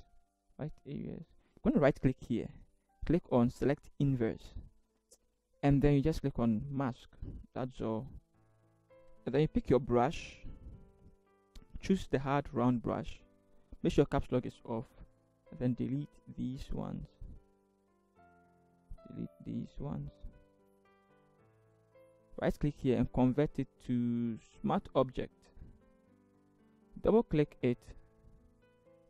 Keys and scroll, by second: 9.6 b.